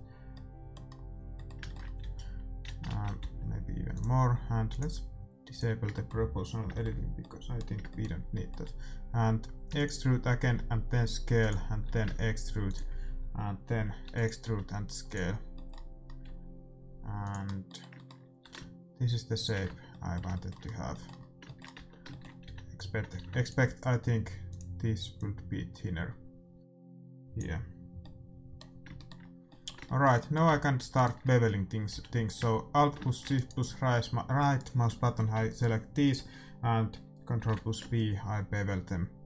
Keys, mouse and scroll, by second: 2.0 a, 2.8 ctrl+z, 3.2 s, 4.6-6.5 drag, 5.9 middle click, 9.6 e, 10.4 s, 11.8 e, 14.0 e, 14.4 s, 15.3-17.6 middle drag, 16.2 s, 18.4 e, 19.6 Tab, 21.7 Tab, 22.4 a, 23.1 ctrl+r, 25.1-27.1 drag, 28.9-33.3 middle drag, 30.9-32.8 right drag, 31.9 a, 33.3-36.4 right drag, 36.2-37.3 middle drag, 37.3 ctrl+b.